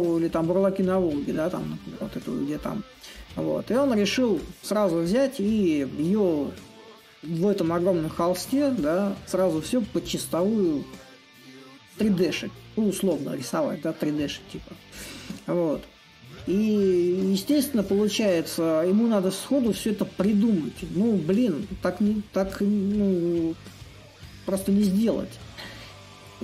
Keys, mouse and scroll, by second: 0.0-5.0 drag, 7.7-15.2 drag, 15.4-20.4 drag, 21.4-26.4 drag.